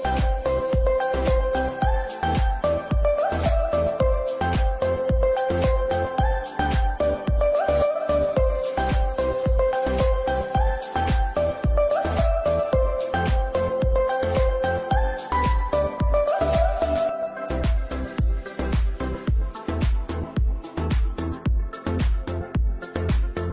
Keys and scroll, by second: 4.9 ctrl+r, 5.6 c, 7.2 c, 9.1 Escape, 13.5 F3, 14.1 Escape, 15.7 ctrl+g, 16.3 ctrl+z, 18.5 ctrl+g, 22.0 F3, 22.3 Escape, 22.5 F2.